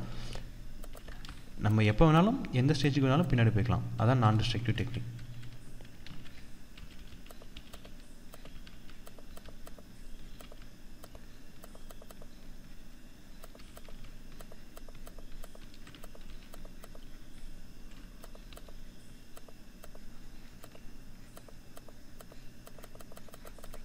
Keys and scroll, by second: 0.6 ctrl+=, 4.4 ctrl+z.